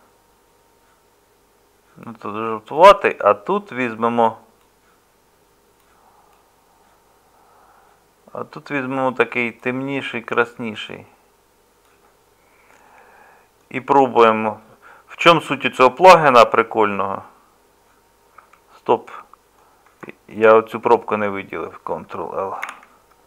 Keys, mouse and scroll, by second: 15.7-18.4 middle drag, 18.4 Tab, 22.6 ctrl+l.